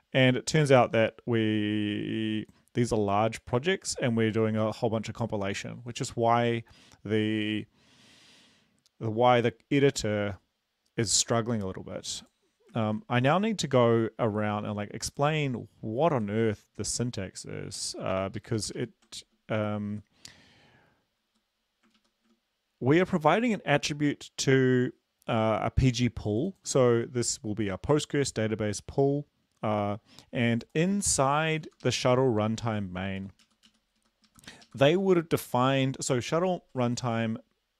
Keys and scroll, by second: 13.7 ctrl+`, 16.6 Right, 18.5 ctrl+shift+Left, 19.0 ctrl+shift+Left, 19.5 ctrl+shift+Left, 19.9 Right, 20.2 Left, 21.6 Right, 22.1 ctrl+shift+Right, 23.0 Left, 32.1 ctrl+shift+Left, 33.6 Down, 34.1 Down, 34.1 Right, 34.6 Left, 35.1 ctrl+shift+Left.